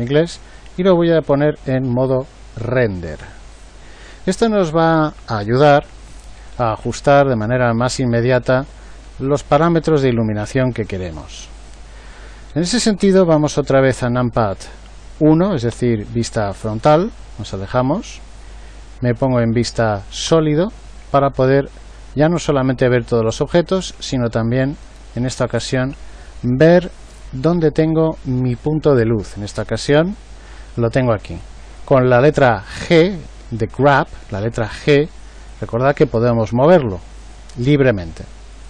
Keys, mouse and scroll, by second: 15.7 KP_1, 20.2 z, 32.7 g.